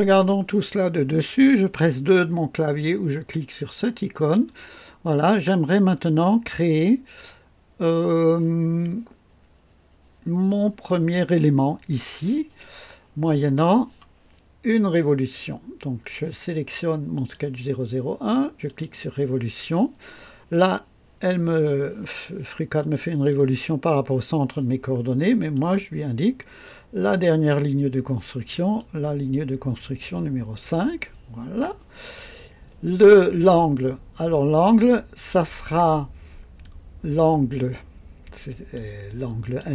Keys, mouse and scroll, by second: 0.0 scroll up 2, 0.6-1.3 right drag, 3.6 click, 17.1 click, 18.6 click, 22.7-23.5 right drag, 25.5 click, 28.5 click, 38.7 click.